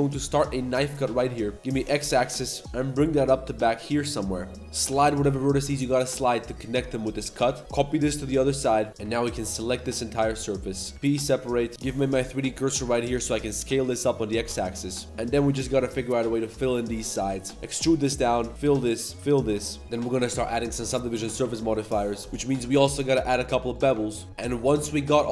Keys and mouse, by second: 4.6 ctrl+z, 4.6-8.9 typing, 5.4 click, 6.1 click, 7.0 click, 9.3 ctrl+shift+click, 9.8 middle click, 10.2 middle click, 10.8 c, 10.9 p, 11.3 Tab, 11.5 click, 11.7 click, 12.0 shift+s, 12.5 a, 13.0 a, 13.3 s, 14.4 Tab, 14.7-15.0 drag, 15.0 z, 15.1 click, 15.5 shift+s, 16.4 ctrl+click, 16.6-19.2 typing, 16.7 click, 17.1 ctrl+click, 18.6 click, 19.3-19.6 drag, 19.8 click, 20.5 ctrl+1, 20.8 shift+drag, 21.1 Tab, 21.4 2, 21.6 alt+click, 22.1 shift+g, 22.3 z, 22.5 ctrl+b, 23.9 Tab, 24.4 middle drag, 24.7 z, 24.8 middle click, 25.1 z, 25.2 middle click.